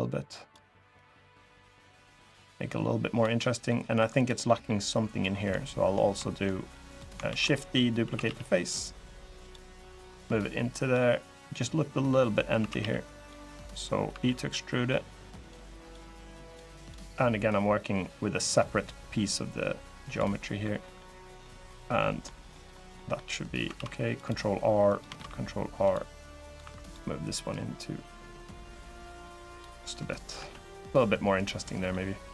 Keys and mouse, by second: 3.1 middle click, 3.7 3, 3.9 click, 4.2 middle click, 7.0 shift+d, 7.2 click, 7.7 s, 8.0 x, 9.1 click, 9.7 click, 12.3 s, 12.5 x, 12.9 click, 13.8 e, 15.1 click, 15.5 click, 16.5 click, 17.2-19.9 drag, 20.1 middle click, 20.6 middle click, 21.1 middle click, 21.7 middle click, 22.2 middle click, 22.7 middle click, 23.5 ctrl+r, 24.6 click, 24.9 ctrl+r, 26.2 click, 26.4 3, 26.6 click, 27.3 click, 29.5 middle click, 30.1 Tab, 31.4-31.7 drag, 32.1 click.